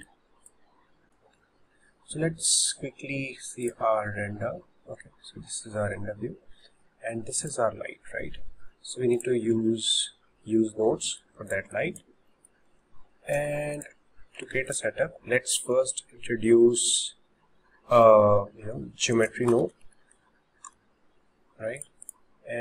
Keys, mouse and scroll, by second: 0.2-0.8 drag, 0.8 scroll down 2, 1.0 click, 4.0 drag, 7.5 click, 9.2 drag, 9.9 shift+middle click, 10.2-10.8 scroll up 9, 11.1-11.6 shift+middle drag, 11.5 click, 11.6 click, 12.0 click, 12.6-13.3 shift+middle drag, 13.3 n, 13.8 click, 14.6 shift+a, 22.1 click.